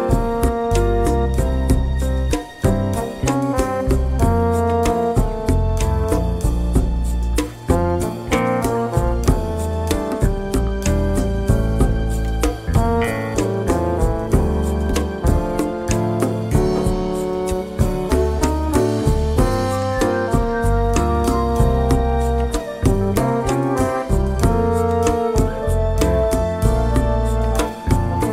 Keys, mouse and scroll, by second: 1.4-5.0 drag, 6.5 click, 7.2 click, 8.9 click, 10.5 click, 11.1 click, 12.6 F7, 13.5 click, 15.5 click, 18.1 F1, 18.8 click, 19.4 click, 20.6 F7, 21.2 click, 22.7 click, 24.4 F1, 25.0 click, 27.2 KP_Add, 28.1 space.